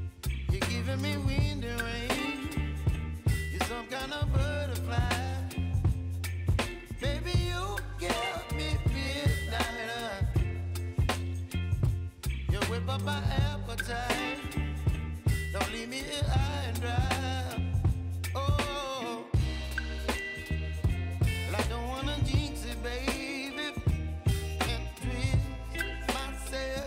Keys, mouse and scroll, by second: 0.4 space, 3.1 click, 5.5 ctrl+c, 6.2 click, 6.7 space, 6.8 click, 7.1 space, 7.8 click, 14.6 scroll down 1, 15.6 ctrl+shift+c, 16.0-17.5 typing, 18.3 click, 19.3 ctrl+a, 19.6-24.0 drag, 24.5 alt+scroll up 1, 25.4-26.8 drag.